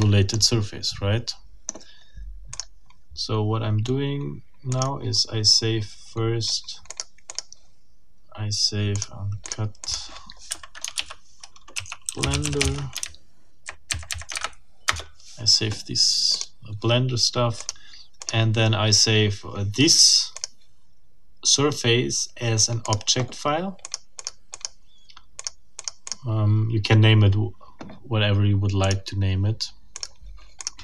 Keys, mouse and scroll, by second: 0.3-1.9 shift+middle drag, 1.9-2.5 scroll up 1, 2.5 click, 2.8-4.7 scroll up 1, 4.7 click, 6.9 click, 7.3 click, 8.9 click, 9.4 click, 9.8 click, 10.5 Up, 11.0 shift+Home, 11.5-13.1 typing, 14.3 shift+Delete, 14.9 shift+Return, 16.3 click, 17.6 middle click, 18.2 click, 20.4 click, 22.9 click, 23.8 click, 24.5 click, 25.4 click, 25.8 click, 28.8 click, 30.0 click, 30.6 click.